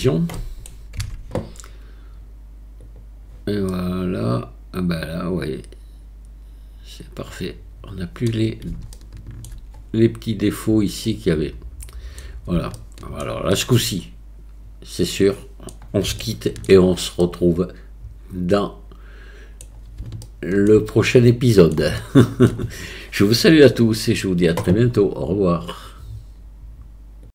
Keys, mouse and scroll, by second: 0.4 middle click, 1.0 Tab, 3.7-8.3 middle drag, 8.9-9.5 shift+middle drag, 11.1-12.2 middle drag, 12.8-13.2 shift+middle drag, 13.5-15.6 middle drag, 16.2-16.7 shift+middle drag, 17.2-19.6 middle drag, 20.2-20.7 shift+middle drag, 21.0-21.7 middle drag, 22.0-22.5 shift+middle drag.